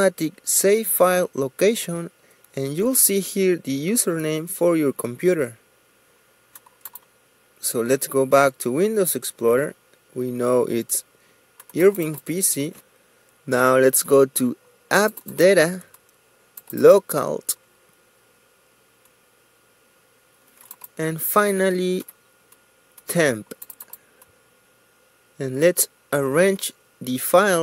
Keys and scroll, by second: 21.3 t.